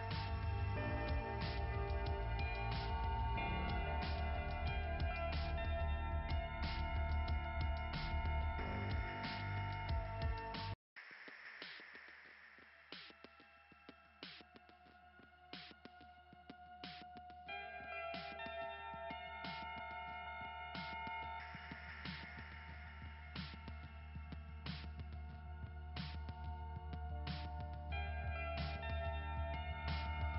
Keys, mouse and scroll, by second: 0.8 click, 1.1 click, 1.3 click, 1.5 click, 4.7 scroll down 2, 5.4-6.7 typing, 5.5-6.0 scroll down 2, 7.5-8.1 scroll up 2, 10.2 click, 12.7-13.5 scroll up 2, 13.5 click, 16.1 click, 17.5 click, 22.1 click, 23.5 click, 24.1 click, 27.9 click.